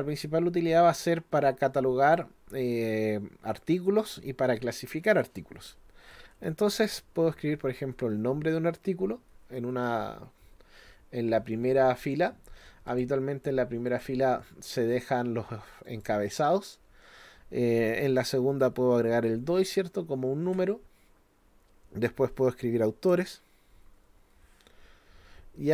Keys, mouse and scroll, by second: 12.9 click, 13.9 click, 15.9 click.